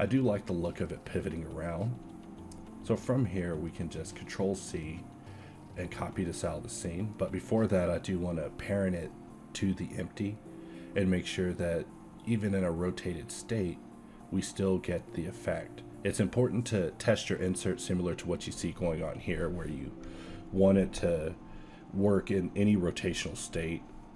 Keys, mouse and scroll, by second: 0.4 a, 3.9 ctrl+p, 5.7 a, 7.3 g, 9.0 alt+a, 9.7 r, 11.3 shift+z, 17.9 alt+a, 18.4 z, 18.7 z, 19.2 alt+r, 19.5 a, 19.7 a, 20.6 ctrl+c.